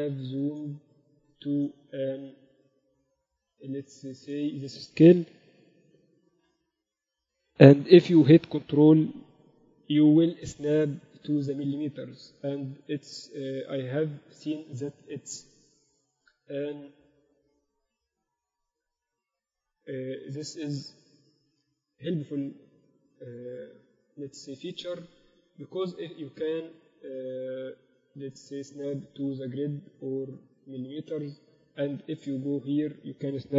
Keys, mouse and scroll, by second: 1.0-5.4 middle drag, 5.4 Up, 6.2 Escape, 6.6 n, 9.1 g, 32.3-33.5 middle drag.